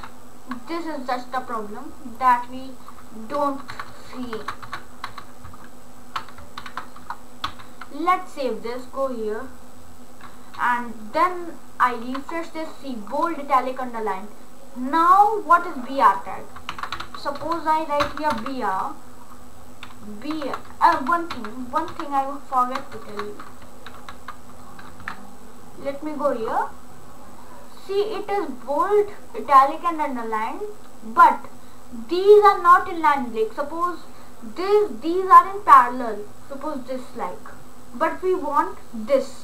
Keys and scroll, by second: 3.7 BackSpace, 6.6 shift+., 7.5 ctrl+s, 16.8-18.9 typing, 20.4 shift+,, 21.0 ctrl+z, 23.0 BackSpace, 23.9 ctrl+s.